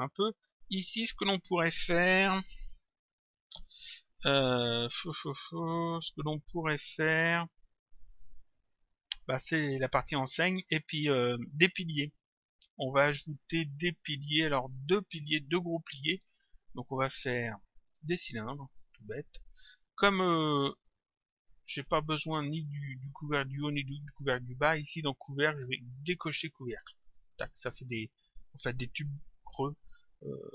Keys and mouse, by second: 0.9 click, 12.9 click, 17.1 click, 20.2 click, 24.8 click, 27.1 click.